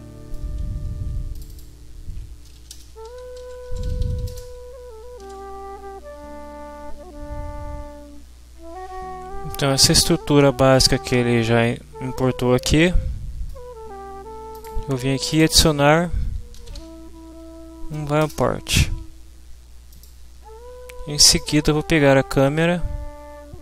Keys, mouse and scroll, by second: 1.3 click, 2.2-4.7 typing, 5.2 ctrl+s, 9.9-10.9 middle drag, 10.9-12.1 scroll down 1, 12.1-13.7 scroll up 1, 14.5 click, 16.3-17.2 typing, 18.3 Return, 19.9 click, 21.4 click.